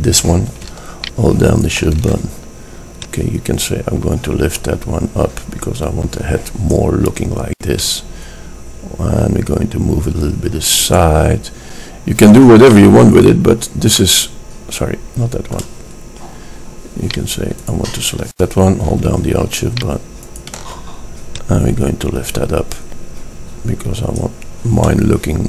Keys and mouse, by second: 0.4 middle drag, 1.6-5.2 middle drag, 8.4-10.3 middle drag, 13.1-15.6 middle drag, 25.3 middle click.